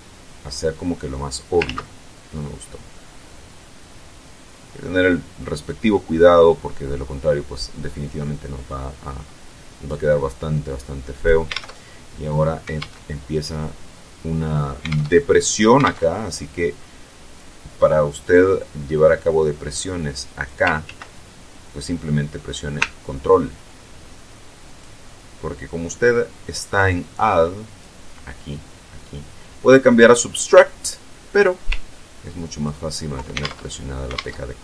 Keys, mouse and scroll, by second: 1.4 ctrl+z, 2.8-5.6 drag, 5.7-9.0 middle drag, 9.7-11.2 drag, 11.3 alt+Tab, 12.6 alt+Tab, 14.6 alt+Tab, 15.6 alt+Tab, 19.2-20.4 drag, 20.5 ctrl+z, 23.4-24.8 ctrl+drag, 25.4-26.6 ctrl+drag, 27.0 ctrl+click, 31.6-32.6 ctrl+drag, 33.1 ctrl+alt+Tab, 33.9 alt+Tab.